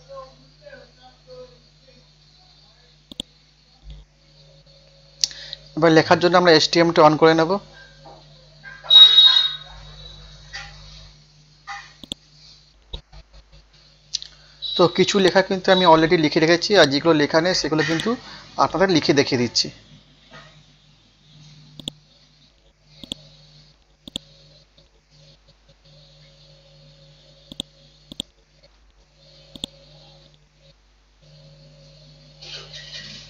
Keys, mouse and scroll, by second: 0.8 scroll up 1, 3.1 click, 12.6-14.1 scroll down 1, 14.1-15.2 scroll up 1, 15.2 click, 15.8-16.3 scroll up 1, 16.8 click, 17.2 scroll up 1, 17.9 click, 19.0 F5, 19.4-20.3 typing, 20.4 ctrl+a, 21.8 click, 24.8 click, 25.2 scroll down 1, 26.0 scroll up 1, 27.5 click, 28.1 right click, 28.5 scroll up 1, 29.5 click, 29.9 ctrl+a, 31.0-32.4 typing.